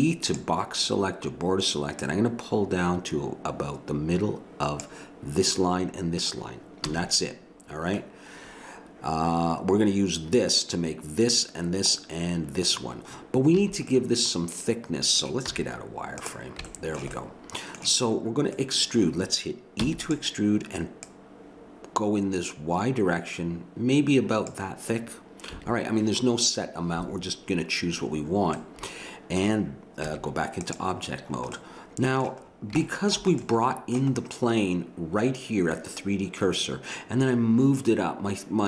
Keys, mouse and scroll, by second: 2.0 click, 6.9 a, 13.5 a, 15.5 z, 19.8 e, 21.0-22.8 drag, 25.5 a, 28.6 middle click, 30.1 Tab, 35.9-38.5 middle drag.